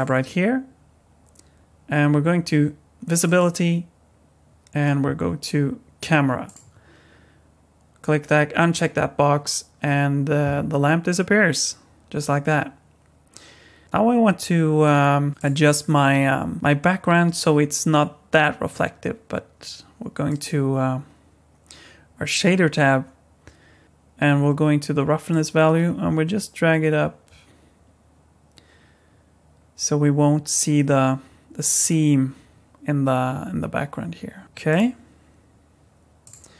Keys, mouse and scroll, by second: 3.2 click, 6.5 click, 12.5-14.0 scroll down 1, 15.4 click, 20.3 click, 25.3 click, 34.4 scroll down 1, 34.7 click, 36.2 click.